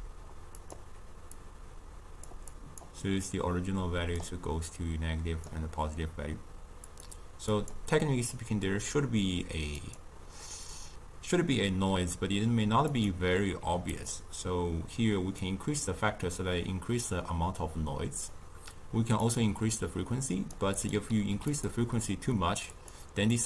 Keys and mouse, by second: 1.3 drag, 2.5 click, 3.2-14.0 drag, 15.4-18.4 drag, 19.2-21.6 drag, 22.7-23.4 drag.